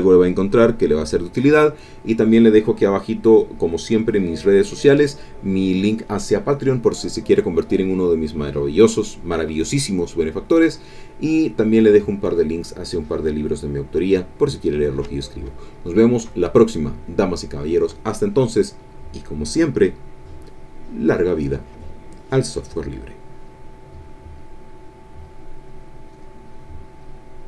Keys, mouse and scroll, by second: 26.1 click, 27.4 click.